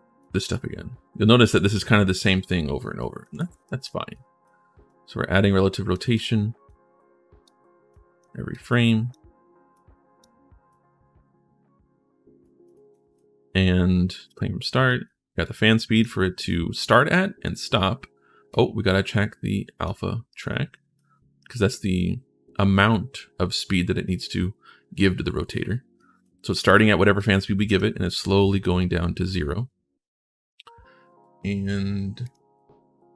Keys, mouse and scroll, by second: 0.0-1.2 drag, 2.8 right click, 3.4 ctrl+v, 3.9 right click, 4.6-5.7 drag, 5.9 click, 6.4 click, 7.7 click, 8.3 click, 9.5 click, 10.5-12.2 drag, 12.4 click, 12.7 click, 15.2 click, 18.3-19.6 drag, 20.1 right click, 25.8 right click, 27.0 click, 32.0 click.